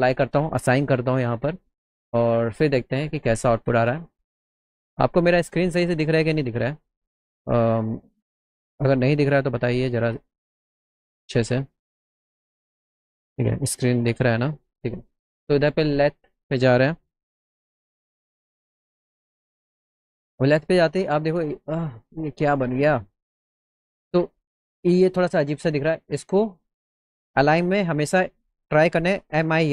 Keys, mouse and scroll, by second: 11.5 click, 13.3 click, 16.2 click, 17.9 k, 19.4 click, 20.6-22.2 alt+middle drag, 22.4 scroll up 2, 22.5 middle click.